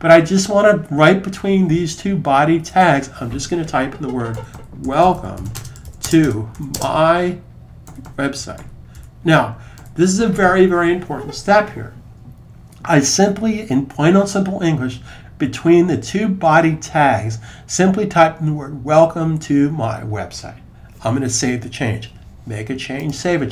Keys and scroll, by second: 3.8-9.9 typing.